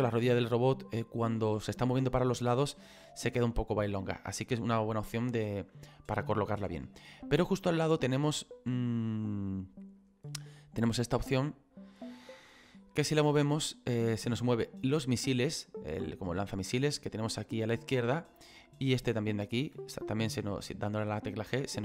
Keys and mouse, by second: 4.4 middle click, 5.9 middle click, 7.7 middle click, 10.0 right click, 11.0 middle click, 18.4 click, 19.2 right click, 19.7 f.